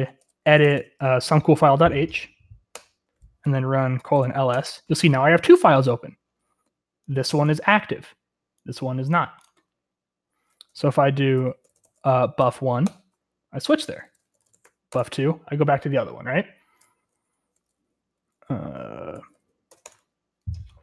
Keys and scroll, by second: 0.0-1.2 typing, 2.7 typing, 3.7-4.7 typing, 11.4-15.1 typing, 16.7-17.6 typing, 18.8-19.9 typing.